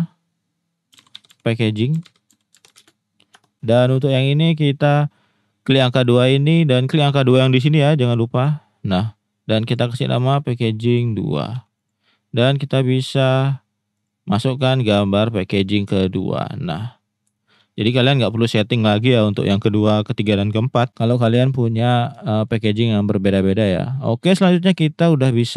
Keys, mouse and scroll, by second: 5.7 click, 8.3 click, 9.6-11.9 drag, 12.9 click, 15.8 click, 16.6 middle click, 17.4 shift+drag, 17.9 middle drag, 18.4 middle click, 19.2 middle click, 20.4 middle drag, 22.2 shift+middle drag.